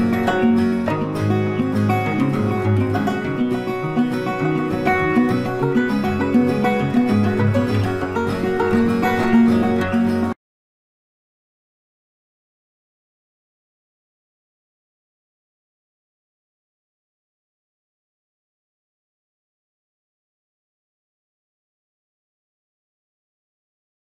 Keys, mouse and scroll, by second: 1.7 click, 6.3 click.